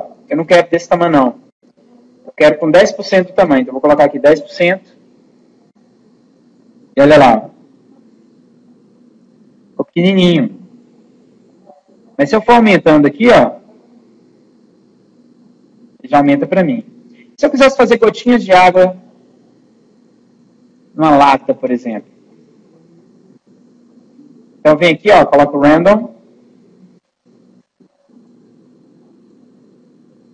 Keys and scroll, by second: 1.4 ctrl+z, 2.0 ctrl+z, 3.3 1.